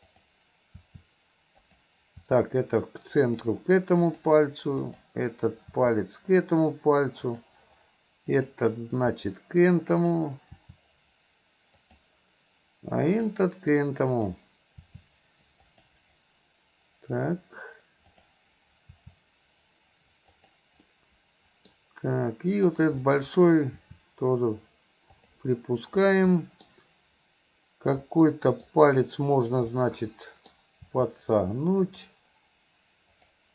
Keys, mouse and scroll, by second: 0.1 click, 0.9 r, 2.2 r, 4.1 click, 4.8 click, 5.8 r, 8.3 click, 9.2 r, 10.6 r, 13.1 click, 14.3 click, 14.9 r, 18.1 click, 18.9 r, 20.3 click, 20.9 middle click, 22.5 click, 23.1 middle click, 23.8 r, 26.4 middle click, 28.1-28.7 middle drag, 29.4 click, 29.8-30.6 middle drag, 30.9 r, 33.1 click.